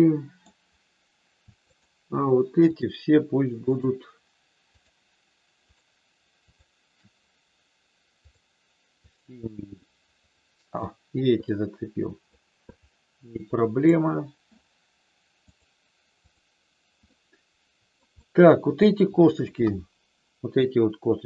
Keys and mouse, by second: 1.6 shift+click, 3.5 shift+click, 4.6 shift+click, 8.3 click, 9.0 click, 9.8-10.9 middle drag, 11.4 middle click, 12.6-13.9 drag, 15.5 click, 16.1 click, 17.0-18.0 middle drag, 18.1 middle click, 19.5 KP_1.